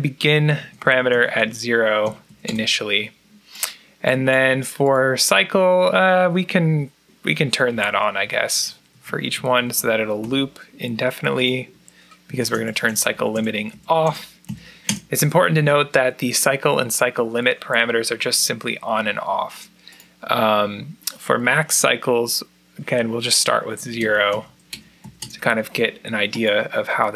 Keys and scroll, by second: 0.4-2.6 typing, 0.5 Down, 0.8 Down, 1.1 Down, 1.4 Down, 2.2 Down, 7.3-10.2 typing, 9.6 Down, 12.1-14.8 typing, 12.5 Down, 13.0 Down, 13.6 Down, 14.4 Down, 23.3-25.0 typing, 23.4 Down, 23.7 Down, 24.0 Down, 24.4 Down, 25.0 Down.